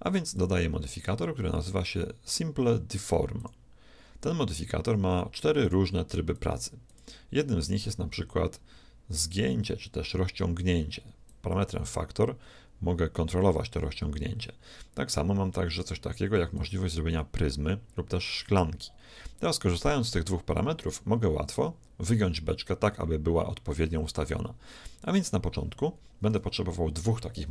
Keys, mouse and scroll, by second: 0.3-2.9 drag, 5.7-8.7 drag, 11.3-13.3 drag, 15.7-18.4 drag, 26.3 KP_1.